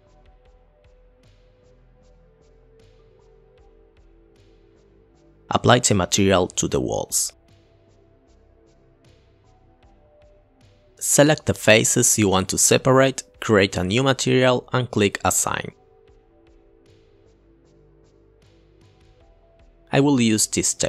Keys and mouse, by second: 1.2 click, 2.4 ctrl+t, 2.5 click, 2.7 click, 3.0 click, 3.4 click, 7.3 click, 8.1 click, 8.5 click, 8.9 KP_Divide, 9.1 middle drag, 9.5 middle click, 9.9 middle click, 10.2 click, 10.7 middle click, 10.9 shift+click, 12.4 ctrl+z, 12.6 shift+click, 13.6-14.1 middle drag, 14.4 middle click, 15.7 click, 17.4 click, 18.2 click, 18.5 click, 18.7 click, 19.0 click.